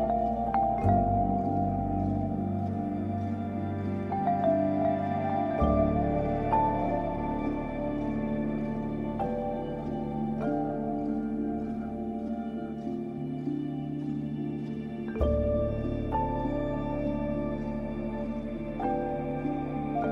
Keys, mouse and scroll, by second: 0.2 scroll up 1, 1.9 alt+click, 3.0-4.2 scroll up 3, 3.3-5.8 typing, 4.6 scroll up 1, 5.4-10.2 drag, 10.2 scroll down 1, 11.4 scroll up 1, 11.8-12.5 typing, 12.2 click, 13.0 click, 13.7-14.3 typing, 13.8 click, 14.6 click, 15.4-16.9 typing, 15.5 click, 16.1 click, 16.7 click, 18.2 typing, 18.2-20.1 drag.